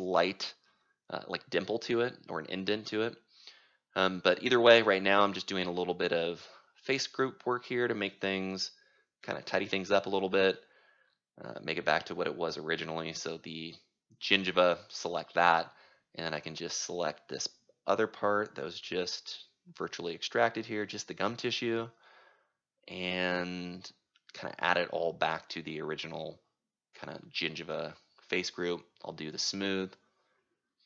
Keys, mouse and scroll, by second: 2.2-3.7 right drag, 3.7-8.9 drag, 9.3 click, 10.5 click, 11.3-16.2 right drag, 17.2-19.8 right drag, 19.8-30.6 drag.